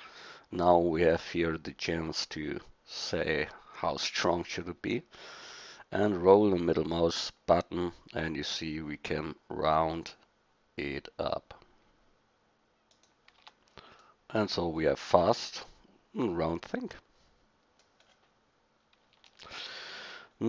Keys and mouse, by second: 13.4 Tab, 14.6 middle drag, 15.4 a, 16.6 middle click, 16.8 middle click, 20.3 middle click.